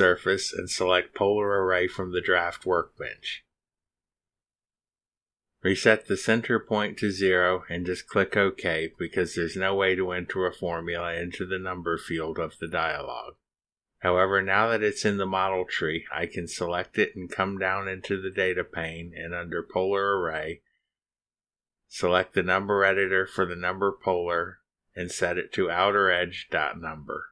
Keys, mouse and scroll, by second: 1.6 click, 3.9 click, 8.3 click, 13.3 click, 15.8 click, 17.0 click, 18.9-19.3 scroll down 2, 20.8 scroll down 2, 22.7 click, 23.8 click, 26.0-27.3 typing.